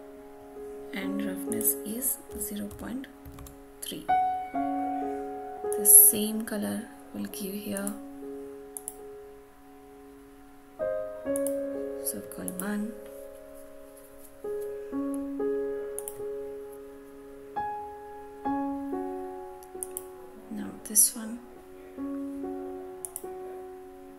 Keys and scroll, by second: 3.3 Return.